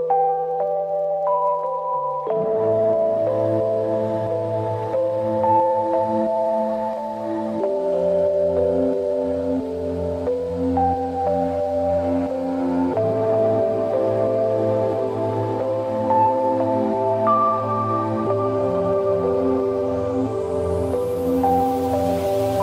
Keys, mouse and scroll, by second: 0.7-2.2 drag, 3.4 scroll down 1, 6.8-7.2 scroll down 1, 7.2-7.9 scroll up 1, 8.6 scroll up 1, 9.0-9.8 scroll down 1, 9.8 click, 12.0 click, 12.5-13.2 scroll down 1, 13.2-14.7 drag, 17.2 click, 19.5 click, 21.3 click.